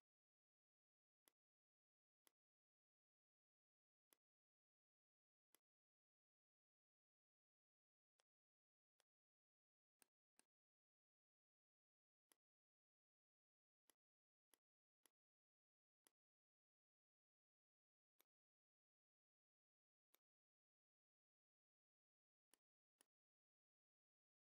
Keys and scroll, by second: 6.8 m, 7.5 l, 8.8 v.